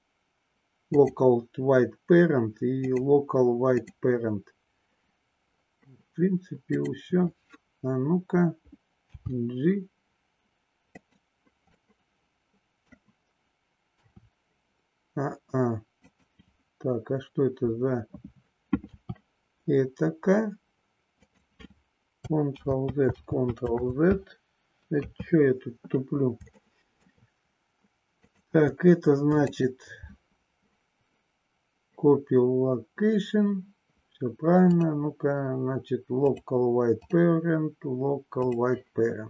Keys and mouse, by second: 2.9-4.0 drag, 9.0 g, 11.1 click, 11.6-12.9 middle drag, 14.0 r, 18.9 r, 21.2 click, 22.5 ctrl+z, 25.0 KP_3, 26.5 shift+middle click, 28.1 click, 29.4 click, 34.7-36.5 drag, 37.1-38.6 drag.